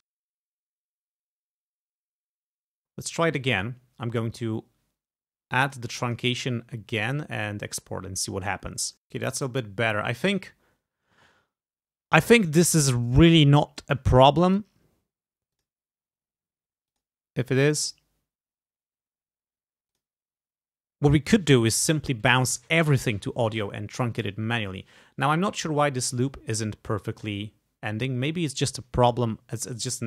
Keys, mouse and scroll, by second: 0.1 click, 0.2-0.5 ctrl+alt+scroll up 4, 0.3 alt+click, 0.6 ctrl+click, 0.8 click, 0.8 click, 1.0 alt+e, 1.2 click, 1.5 click, 1.6-2.4 typing, 1.6 scroll down 2, 1.7 click, 1.9 click, 1.9 click, 2.1 click, 2.2 click, 2.4 click, 2.6 click, 2.8 alt+e, 4.4 click, 5.7 click, 6.1 click, 7.0 click, 8.9 click, 12.4-14.0 drag, 14.5 click, 15.5 click, 16.9 click, 17.8 click, 19.9 click, 25.3 click.